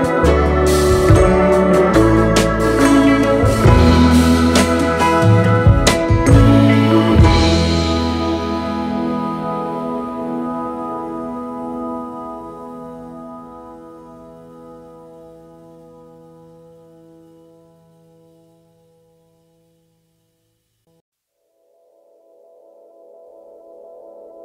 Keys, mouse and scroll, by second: 3.8 space, 3.9 double click, 4.5 space, 5.7 BackSpace, 10.4 typing, 12.5 typing, 15.4 typing, 19.3 alt+scroll up 2, 20.0-21.0 space, 21.6-23.9 space, 24.1 space.